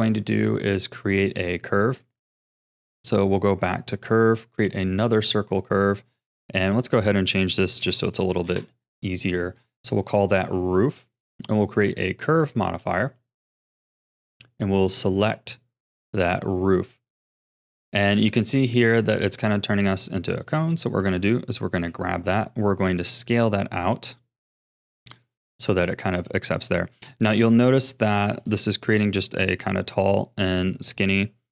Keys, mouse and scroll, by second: 1.1 shift+a, 6.5 click, 6.7-8.2 drag, 8.2 o, 9.9 click, 11.2-14.2 drag, 14.8-17.8 drag, 18.4-20.4 shift+middle drag, 20.4 click, 21.8 s, 24.7-28.8 middle drag, 28.8 KP_1, 29.9 KP_3.